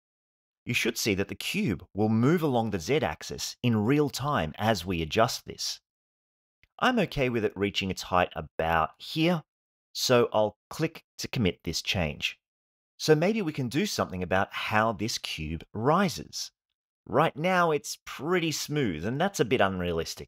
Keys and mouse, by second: 12.9 click, 14.8 space, 19.8 Home.